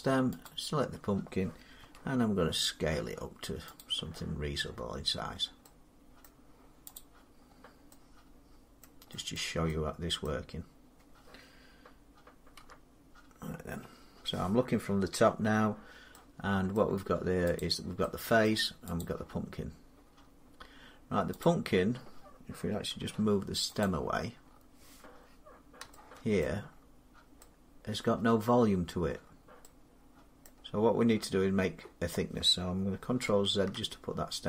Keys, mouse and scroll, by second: 0.4 shift+click, 1.6 s, 2.0 scroll, 3.6 click, 4.0 middle click, 4.1 middle click, 6.1 scroll down 5, 6.4 middle click, 6.8 click, 7.3-7.8 scroll down 1, 8.7 middle click, 9.2 scroll, 9.5-9.9 scroll down 3, 9.8 scroll, 10.1 scroll, 10.3-12.4 scroll down 1, 12.5 7, 15.1 middle click, 16.6 middle click, 17.4 click, 18.3 middle click, 18.8 click, 21.2 click, 22.8 g, 23.7 click, 24.3-25.8 scroll up 5, 26.3 shift+middle click, 26.6 middle click, 27.2 scroll down 5, 28.2 middle click, 29.1-29.7 scroll down 2, 30.3 middle click, 30.4 scroll down 1, 30.6-31.4 scroll, 33.1 ctrl+z.